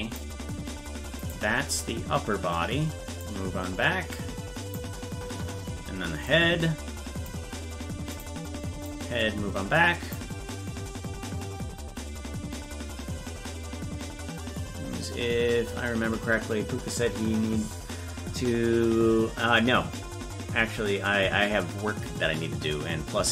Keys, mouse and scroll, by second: 1.3 right click, 3.2-4.7 drag, 6.3 click, 8.2 right click, 8.8-10.1 drag.